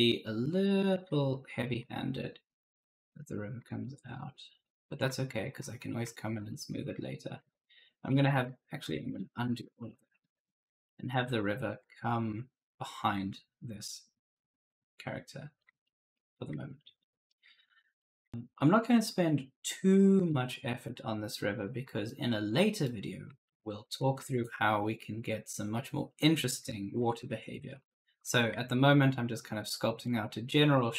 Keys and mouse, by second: 0.4 shift+click, 1.2 right click, 2.2 shift+click, 3.7 shift+click, 4.3 right click, 5.2 shift+click, 6.4 right click, 6.6 d, 7.3 ctrl+z, 7.7 right click, 7.9 ctrl+z, 8.4 right click, 8.8 ctrl+z, 10.7 right click, 11.2 ctrl+z, 14.2 shift+click, 15.7 right click, 16.5 shift+click, 17.5 right click, 18.3 shift+click, 20.2 right click, 21.0 shift+click, 21.9 right click, 22.9-24.6 typing, 23.7 right click, 25.1 shift+click, 27.4-28.4 typing, 27.6 right click, 28.6 shift+click, 29.7-30.6 typing, 30.0 right click.